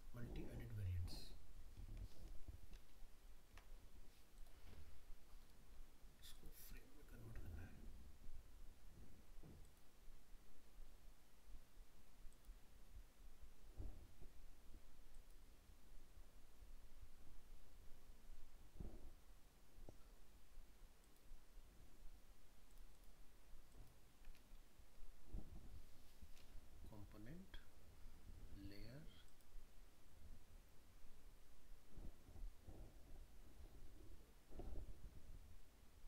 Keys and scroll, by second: 2.1 ctrl+z.